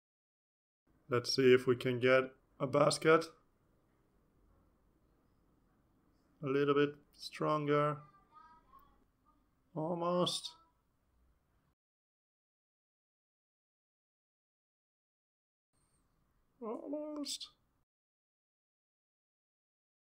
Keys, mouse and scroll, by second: 0.2 ctrl+s, 1.7 click, 3.5 click, 4.2 click, 4.6 click, 5.4 click, 8.3 click, 10.0 click, 10.9 click, 11.7 click, 17.0 click, 18.2 click, 18.8 click.